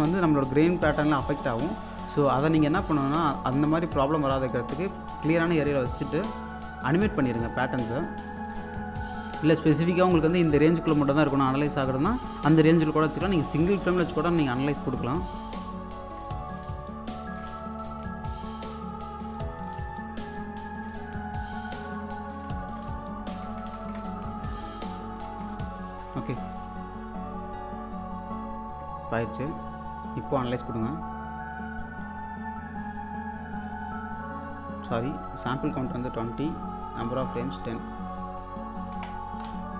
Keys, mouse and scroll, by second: 5.3 space, 5.7 alt+click, 8.1 shift+Right, 8.7 click, 9.3 shift+Right, 14.0 shift+Right, 14.0 typing, 15.0 click, 15.3 shift+Right, 15.7-17.5 drag, 17.8 alt+Left, 19.3 click, 20.6 shift+Right, 21.2 click, 22.0 shift+Right, 22.8 click, 23.3 shift+Right, 27.3-28.8 drag, 29.5 click, 32.0 click, 34.4 click, 36.9 click.